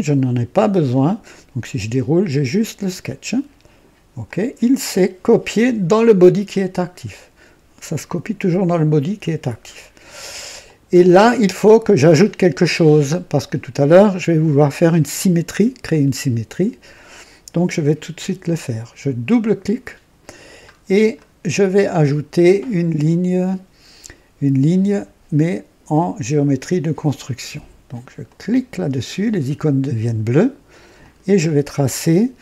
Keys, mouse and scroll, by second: 1.0 click, 4.2 click, 10.6 click, 19.2 click, 20.6-21.1 scroll up 2, 21.1-22.0 right drag, 28.2 click, 30.9 click.